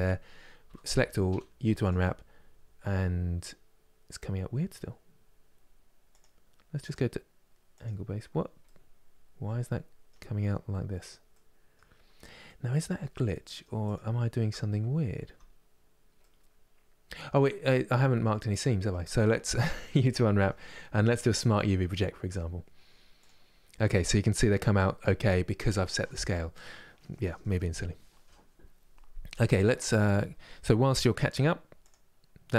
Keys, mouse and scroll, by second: 0.3 a, 1.5 u, 6.6-8.3 drag, 8.3-11.7 middle drag, 11.7-12.1 scroll down 1, 12.1 middle click, 12.6 Tab, 13.0 middle click, 13.6 click, 14.2 Tab, 14.8 a, 15.9-22.9 middle drag.